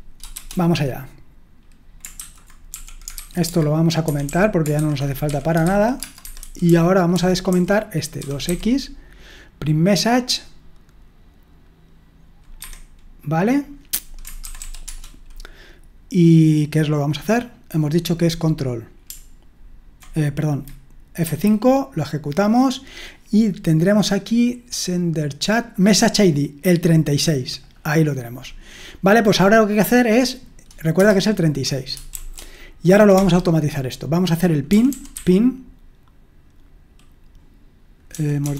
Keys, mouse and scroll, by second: 2.0-8.9 typing, 12.6 Escape, 14.2-15.1 typing, 21.2 F5, 32.1 typing, 33.2 typing, 34.4-35.6 typing, 38.1-38.5 typing.